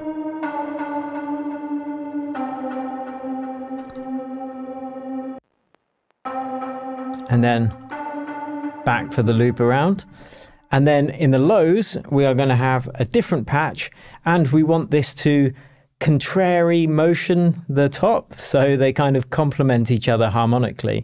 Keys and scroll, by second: 0.1 shift+Tab, 5.3 space, 10.0 shift+Tab, 12.6 shift+super+m, 13.3 shift+super+Tab, 13.8 shift+super+Tab, 13.9 shift+super+r, 14.4 super+r.